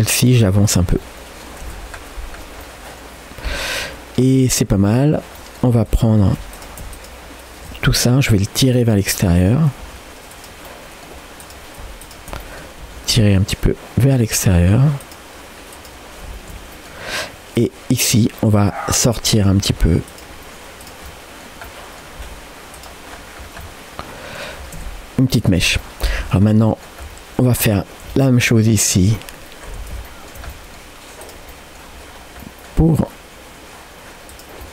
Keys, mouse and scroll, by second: 1.0 middle click, 1.7 Tab, 1.9 scroll down 2, 2.6-4.2 middle drag, 2.6-3.1 scroll down 1, 4.4-5.3 scroll up 4, 4.8 Tab, 5.4 middle click, 5.9 shift+click, 6.6-7.9 drag, 7.9 g, 9.4 click, 9.9 g, 10.7 middle click, 11.4 click, 12.1 shift+click, 12.4 middle click, 12.9 g, 15.8 click, 16.8 middle click, 17.6 click, 18.1-18.5 scroll down 2, 18.7 middle click, 19.5 g, 20.8 click, 21.1 middle click, 21.7 middle click, 22.2 g, 23.1-23.9 scroll down 3, 23.6 middle click, 24.5 scroll up 3, 24.8 Tab, 25.3-25.7 scroll up 2, 25.8 shift+middle click, 26.2-26.7 scroll down 3, 26.7-27.2 scroll up 2, 26.7 middle click, 27.6 scroll down 1, 28.1 shift+middle click, 28.5-29.2 scroll up 2, 29.2 middle click, 29.8 Tab, 30.1 shift+middle click, 30.5 middle click, 31.2 click, 31.5 middle click, 32.0-32.6 scroll up 2, 32.4 middle click, 32.9 g, 34.6-34.7 middle drag.